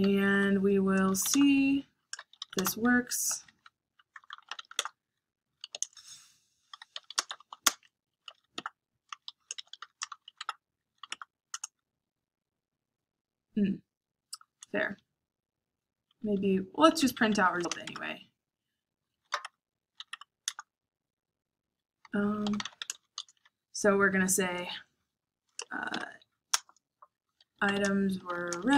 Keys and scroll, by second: 0.0-11.5 typing, 14.9 Up, 15.4 Up, 16.1 Down, 16.9 Down, 17.6-19.9 typing, 18.2 Tab, 20.0 Tab, 20.8 Return, 21.5-23.7 typing, 25.6-28.7 typing.